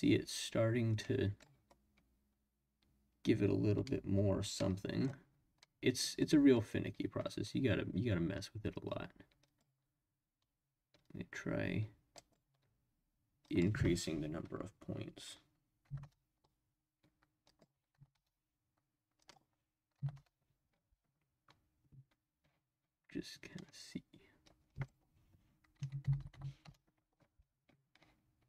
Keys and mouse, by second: 1.3 middle click, 4.5-5.1 middle drag, 5.6-6.1 middle drag, 9.4 click, 11.0-12.4 drag, 13.5-16.4 drag, 17.5-18.9 drag, 19.2-20.7 drag, 24.8-27.1 drag, 26.2 0, 26.3 0.